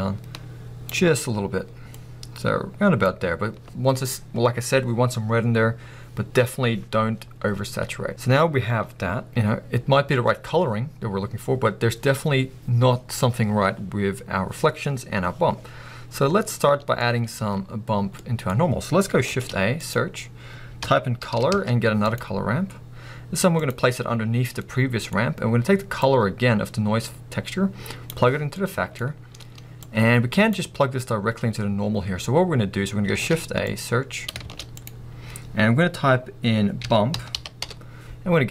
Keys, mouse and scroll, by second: 22.3-23.8 middle drag, 22.3 o, 23.8 click, 24.1 scroll down 1, 24.7-28.0 middle drag, 28.0-28.6 drag, 28.6-29.9 middle drag, 29.3-29.9 scroll up 2, 29.9-38.5 drag.